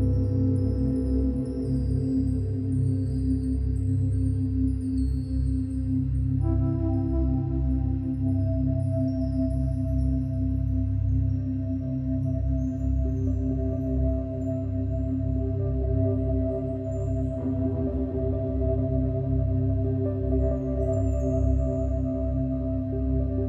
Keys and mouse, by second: 0.6 alt+click, 1.3 alt+shift+click, 2.0-4.9 alt+shift+drag, 4.9-7.1 drag, 9.2-9.8 drag, 10.2-11.8 drag, 11.8-12.5 typing, 13.6-14.4 drag, 14.7-15.3 typing, 18.5-20.6 drag, 21.7 click.